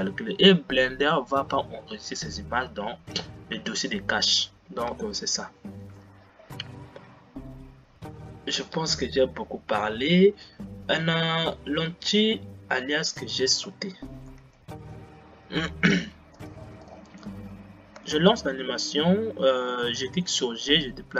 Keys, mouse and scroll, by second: 8.5-9.8 scroll down 8, 14.5 g, 17.0 click, 18.1 space, 20.2 g.